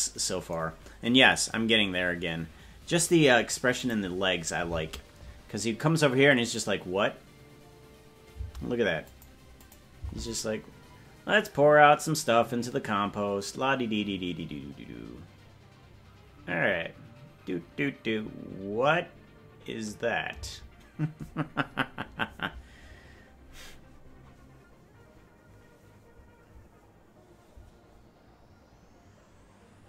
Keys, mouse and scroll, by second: 3.9 click, 4.7 space, 8.5 space, 9.1 click, 9.7 click, 10.0 space, 21.5 space.